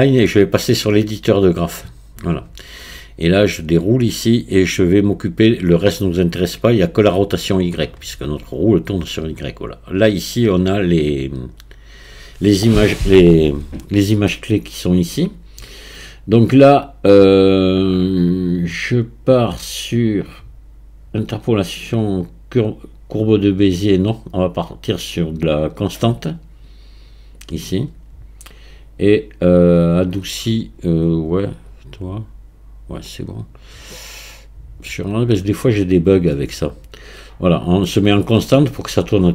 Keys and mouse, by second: 3.6 click, 7.4 click, 21.9-27.6 drag, 31.7-35.1 drag.